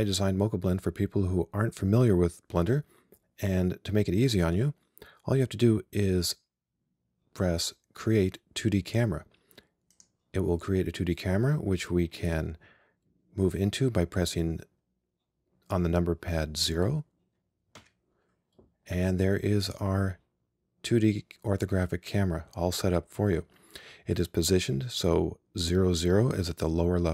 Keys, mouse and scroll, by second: 17.8 KP_0.